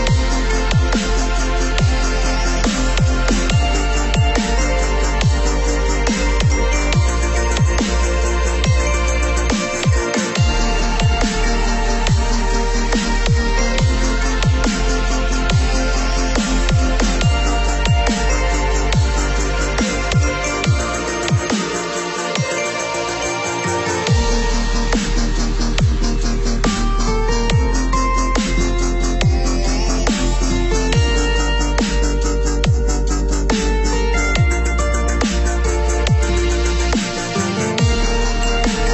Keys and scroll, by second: 33.9 ctrl+=.